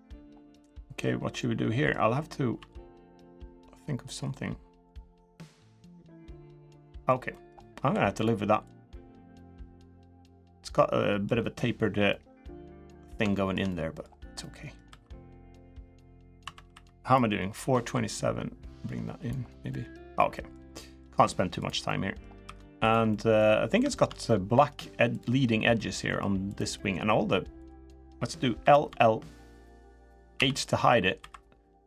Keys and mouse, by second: 1.1 middle click, 2.3 s, 4.9-6.8 middle drag, 7.1 middle click, 7.6 2, 7.9 click, 8.4-9.9 drag, 10.1 middle click, 11.8-12.8 middle drag, 13.1 shift+middle click, 13.4 middle click, 14.1 middle click, 14.6 3, 16.2 2, 16.5 3, 16.8 click, 17.6-19.0 drag, 19.5 middle click, 20.1 middle click, 20.5 middle click, 21.6 middle click, 22.2 3, 22.8 middle click, 23.7 shift+middle click, 24.0 middle click, 26.5 middle click, 27.7 middle click, 28.3 l, 28.6 l, 30.1 h, 30.4 middle click, 30.9 3, 31.6 c.